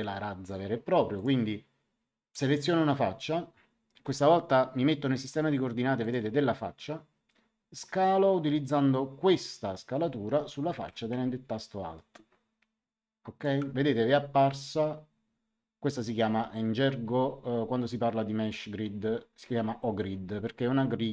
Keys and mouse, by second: 1.1 click, 6.0 click, 11.5 click.